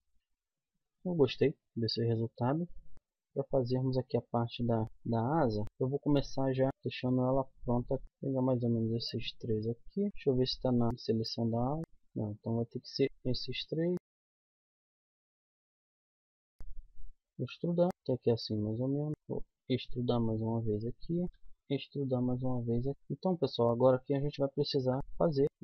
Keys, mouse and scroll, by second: 2.9 KP_1, 4.2 z, 4.7 middle click, 5.6 click, 6.2 middle click, 6.9-10.6 right drag, 10.1 KP_1, 10.1 z, 10.6 middle click, 11.8 middle click, 12.0 z, 12.8-14.8 drag, 14.8 middle click, 15.2 middle click, 15.3 KP_1, 15.4 z, 15.8 z, 16.5 e, 17.9 z, 18.6 click, 19.2 e, 21.3 e, 22.9 z, 24.3 click, 24.7 a, 25.2 c.